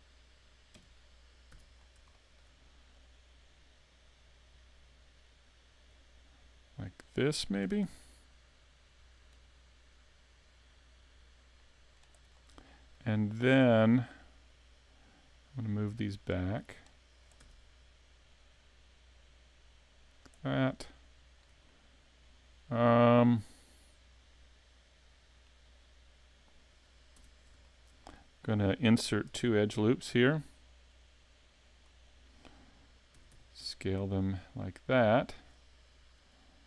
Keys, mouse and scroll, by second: 0.8 KP_5, 1.5 z, 1.8 scroll up 1, 2.1 shift+middle click, 3.0 click, 6.5 scroll down 3, 7.6 s, 9.4 click, 9.9 click, 12.3 scroll up 3, 12.7 shift+middle click, 13.2 middle click, 14.5 click, 17.4 z, 18.3 click, 20.5 scroll up 3, 20.8 shift+middle click, 21.7 middle click, 27.3 Tab, 27.7 shift+middle click, 28.1 scroll up 1, 28.1 middle click, 29.3 ctrl+r, 32.0 click, 33.1 s, 35.5 click.